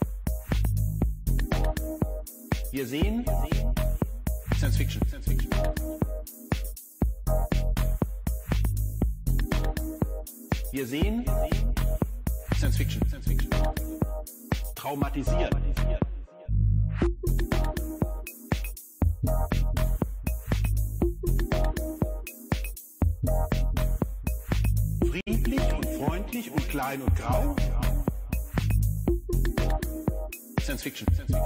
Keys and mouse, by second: 2.8-5.6 drag, 7.0 click, 8.5 click, 10.7 shift+a, 16.8-17.7 drag, 20.2 click, 22.4 middle click, 24.0-28.3 drag, 30.4-31.4 drag.